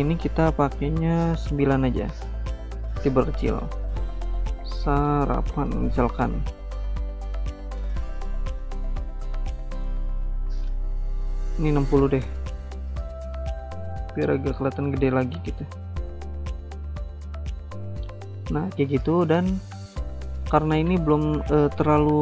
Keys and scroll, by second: 4.1-6.0 typing, 11.6-12.3 typing.